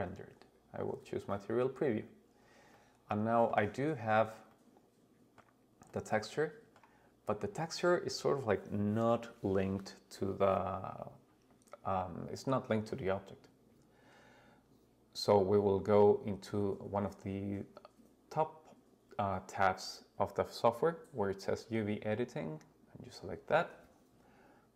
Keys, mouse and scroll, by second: 2.7-3.5 middle drag, 3.7-4.4 scroll, 4.4 scroll, 4.5-5.4 middle drag, 5.3 scroll up 1, 5.9-6.8 middle drag, 7.2-8.9 scroll down 1.